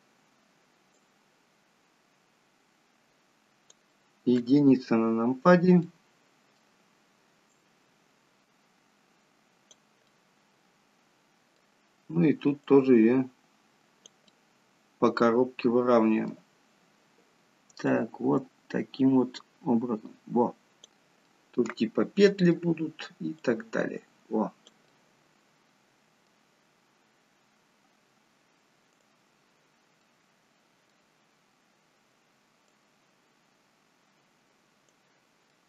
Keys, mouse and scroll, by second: 0.9 click, 5.7 middle click, 10.0 middle click, 12.6 click, 14.3 middle click, 17.8 click, 21.1 middle click, 23.3 click, 24.8 middle click, 28.9 click, 29.9 middle click, 32.5 click, 35.5 middle click.